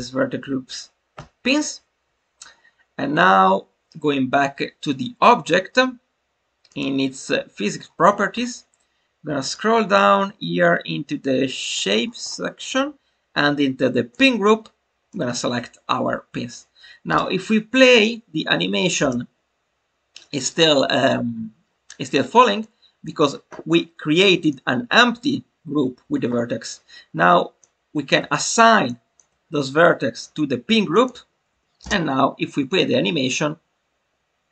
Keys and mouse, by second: 9.4 click, 11.6 click, 14.1-15.2 drag, 22.6 click, 24.4 click, 27.6 click, 29.0 shift+click, 30.9-34.5 drag.